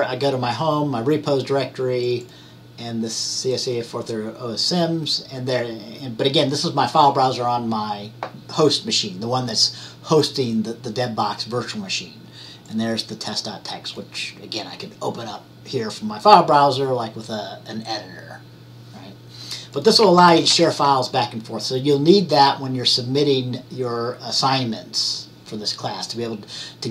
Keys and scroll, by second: 20.4 ctrl+x, 20.6 ctrl+c.